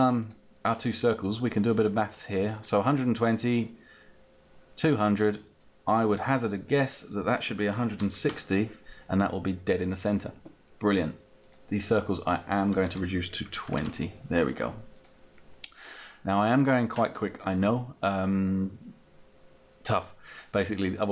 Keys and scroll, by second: 7.0 1, 7.7 6, 8.0 0, 8.2 Return, 13.3 2, 13.5 Return.